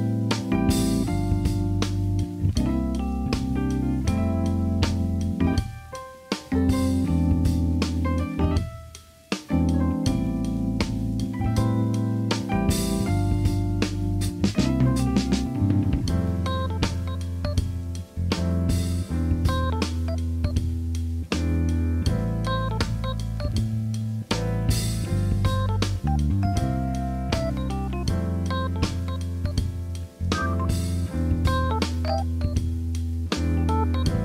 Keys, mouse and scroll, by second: 3.0 KP_1, 4.8 shift+middle click, 6.3 e, 7.8 middle click, 8.4 right click, 9.0-10.3 right drag, 11.2 KP_1, 13.1 s, 15.9 g, 17.9 KP_3, 20.5 KP_1, 21.7 r, 22.2-23.4 drag, 24.1 ctrl+r, 24.5-25.5 drag, 25.5 s, 25.8 click, 26.2 KP_3, 28.2 Tab, 29.0 shift+middle click, 29.2 middle click, 29.6-30.7 middle drag, 30.7 alt+z, 31.0 shift+middle click, 31.2-32.2 middle drag, 32.5 click, 32.7-34.1 right drag.